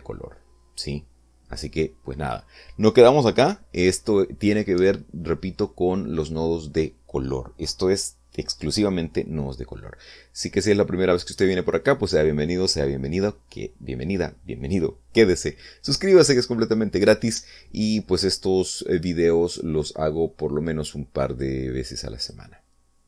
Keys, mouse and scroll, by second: 20.5 click, 22.3 click.